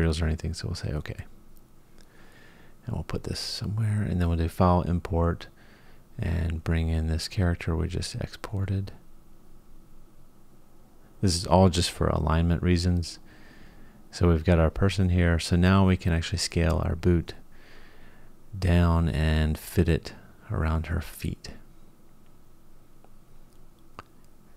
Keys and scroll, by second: 24.1 g.